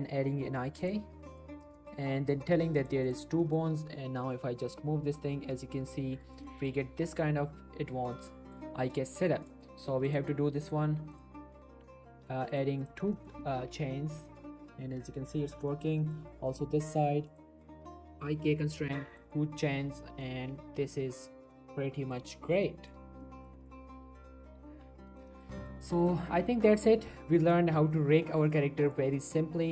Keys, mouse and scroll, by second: 1.0 click, 1.3 middle click, 1.6 scroll down 1, 1.7 middle click, 2.8 click, 3.4 middle click, 3.6 g, 6.2 right click, 6.4 middle click, 6.8 g, 8.1 right click, 8.2 scroll down 1, 8.3 middle click, 8.6-9.1 scroll up 1, 9.2 shift+middle click, 9.7 click, 13.1 middle click, 13.4 shift+middle click, 13.7 middle click, 14.1 shift+scroll down 1, 14.3 g, 15.4 right click, 15.7 shift+middle click, 16.0 middle click, 16.5 click, 20.0 g, 21.4 right click, 21.6-22.2 middle click, 22.9-23.2 scroll up 1, 23.2 middle click, 23.7 click, 24.7 r, 25.1 right click, 25.4 shift+middle click, 26.0 click, 26.2 r, 26.5 right click, 26.8 click, 26.9 g, 28.2 right click, 28.4 middle click, 28.9 click, 29.1 g.